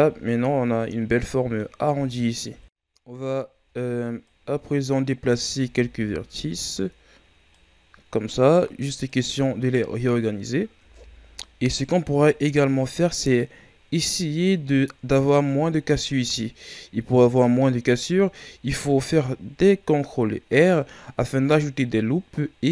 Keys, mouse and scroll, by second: 0.1-1.0 shift+scroll up 5, 1.2-2.4 middle drag, 2.4 KP_1, 2.9 scroll up 2, 3.5 Tab, 4.2-5.6 right drag, 5.6 Tab, 6.3 Tab, 7.5-10.0 right drag, 10.0 scroll down 2, 10.8 Tab, 11.6-12.8 scroll down 4, 12.8 scroll up 3, 13.7-16.8 scroll up 3, 17.5 scroll down 2, 18.1-19.0 shift+scroll up 1, 19.0-22.1 scroll up 2.